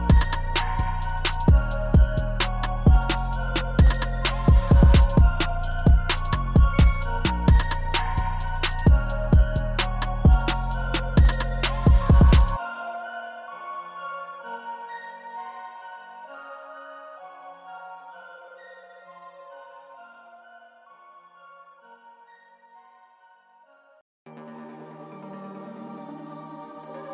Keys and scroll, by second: 5.5 3, 8.0 3, 15.5 5, 16.5 0, 18.7-19.6 typing, 25.9-27.1 typing.